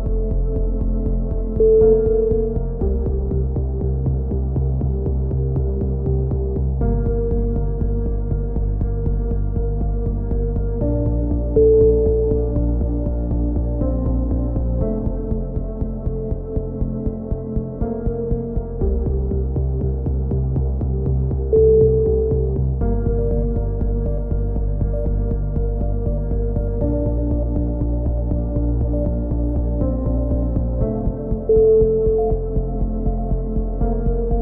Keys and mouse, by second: 0.1 middle click, 0.5 right click, 0.8 click, 0.8 right click, 2.4-4.2 drag, 4.2 a, 5.6 right click, 6.5 click, 8.0 a, 8.8-9.9 drag, 9.2 right click, 9.8 a, 9.9 z, 10.7 z, 12.4-14.7 middle drag, 14.2 z, 16.0 z, 17.6-21.4 middle drag, 22.3-23.5 middle drag, 23.9-25.0 right drag, 25.1 g, 28.1 a, 30.3-32.3 right drag, 32.3 alt+m, 33.5 a, 33.8 z, 34.1 z.